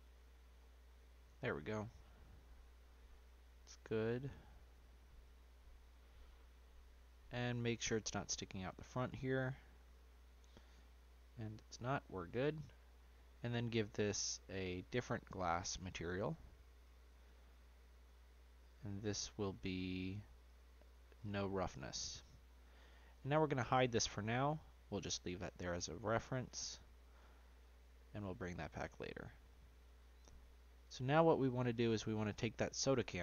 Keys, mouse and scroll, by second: 0.6 scroll up 2, 0.7-1.1 middle drag, 1.1-1.5 scroll down 1, 1.5-1.8 shift+middle drag, 1.8 shift+scroll up 1, 1.9-3.2 middle drag, 3.2-4.0 scroll up 1, 4.0 g, 6.1-6.9 middle drag, 6.9-7.3 scroll up 2, 7.3-9.7 shift+middle drag, 9.7-10.1 scroll down 3, 10.1-12.3 middle drag, 12.3 scroll down 1, 12.5-14.2 shift+middle drag, 14.2 click, 15.1 click, 15.5-19.8 drag, 20.4-22.1 drag, 22.1-23.1 middle drag, 23.1 h, 23.6-26.3 middle drag, 26.3-27.3 scroll up 1, 27.3-29.8 shift+middle drag, 29.8 click, 30.4-32.8 middle drag, 32.8 click.